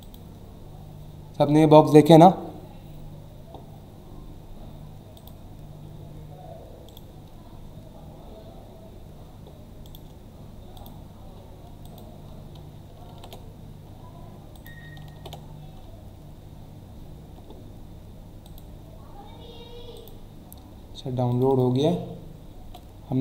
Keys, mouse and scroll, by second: 0.0 click, 3.6 scroll down 1, 5.2 click, 6.9 right click, 8.5 scroll down 1, 9.8 right click, 10.8 click, 11.8 click, 13.1 n, 14.5 click, 15.1 ctrl+v, 16.0 alt+scroll up 1, 17.0-17.3 scroll up 1, 18.4 click, 19.9 click, 21.3 click.